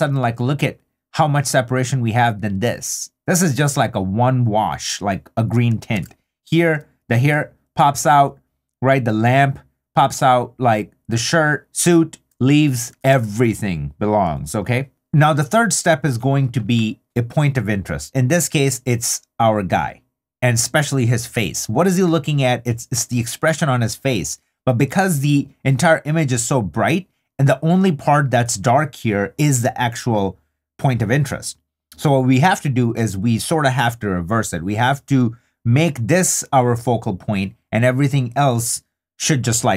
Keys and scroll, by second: 6.0 super+d, 7.8 3, 12.3 super+d, 14.9 3.